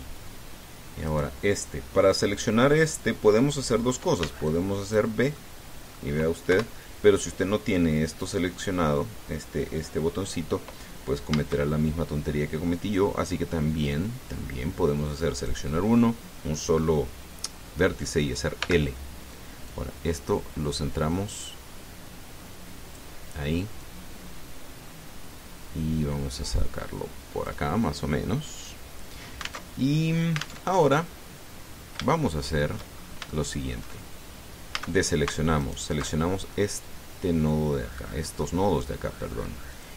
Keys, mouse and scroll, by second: 0.4 click, 1.9 right click, 5.0 b, 5.2 click, 6.1 middle click, 7.3 KP_1, 12.1 a, 16.1 click, 19.4 l, 20.5-23.9 drag, 24.6-28.4 drag, 30.4 alt+Tab, 31.5 alt+Tab, 32.4-32.8 scroll up 3, 32.9 shift+middle click, 33.8 shift+scroll up 2, 34.1 shift+middle click, 35.6 a, 36.4 alt+shift+right click, 37.0 alt+shift+scroll down 2, 37.3-39.4 drag.